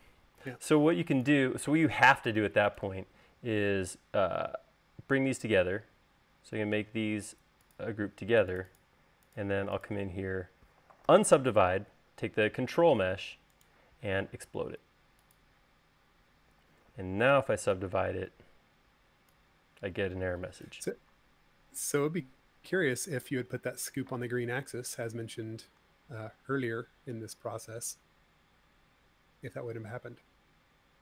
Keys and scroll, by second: 11.4 u, 17.6 u, 23.6 super+z.